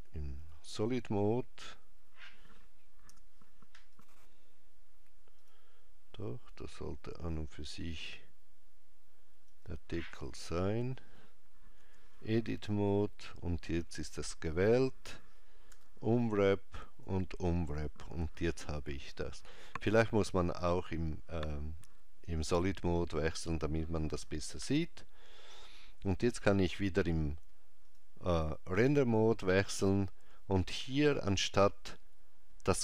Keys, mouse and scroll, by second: 3.1 Tab, 4.0 click, 5.4 click, 9.5 click, 10.5 click, 11.9 Tab, 12.7 click, 15.8 u, 27.9 click.